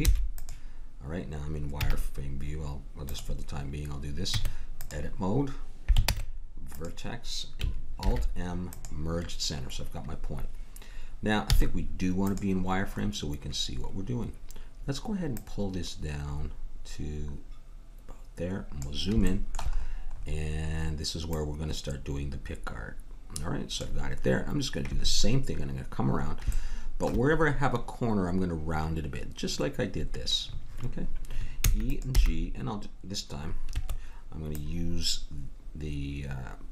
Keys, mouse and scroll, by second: 1.8 z, 4.3 Tab, 6.1 ctrl+Tab, 8.0 alt+m, 11.6 z, 15.3-17.1 drag, 19.3 middle click, 21.3-23.2 drag, 26.6-28.7 middle drag, 31.6 e, 32.1 g, 34.5-36.2 drag.